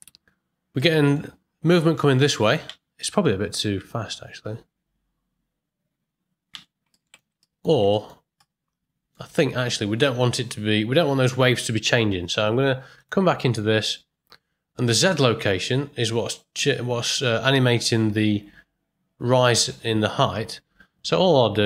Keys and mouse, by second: 0.8-1.2 middle drag, 2.6 space, 3.3 ctrl+click, 3.7 space, 6.9 click, 6.9 space, 7.4 ctrl+click, 7.9 shift+click, 8.4 middle click, 9.8 ctrl+middle click, 12.9 click.